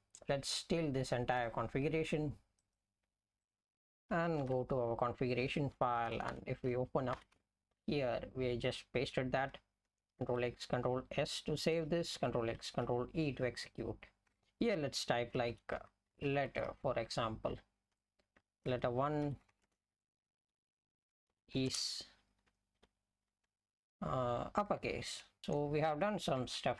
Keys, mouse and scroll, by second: 6.0 Return, 6.1 Return, 6.3 Return, 7.2 ctrl+y, 10.7 ctrl+s, 12.9 ctrl+e, 14.2 Return, 15.3-17.2 typing, 18.4-21.7 typing, 22.9 shift+u, 24.4 BackSpace, 25.4 Left.